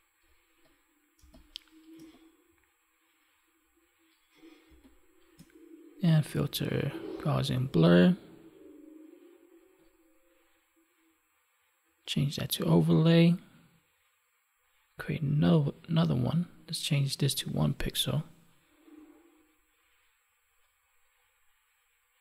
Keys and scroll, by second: 1.1 space, 4.6 space.